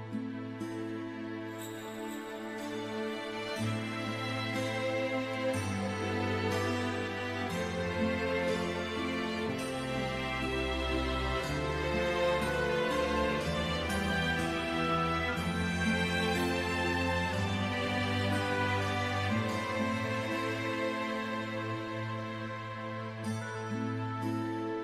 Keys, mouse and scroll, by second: 1.3-1.7 scroll down 1, 2.0 middle click, 4.3-4.9 scroll up 1, 7.3 F4, 9.4 scroll up 1, 12.7 click, 13.9-14.6 scroll up 1, 14.6 click, 15.6 right click, 17.9 click, 20.4 click, 24.4 click.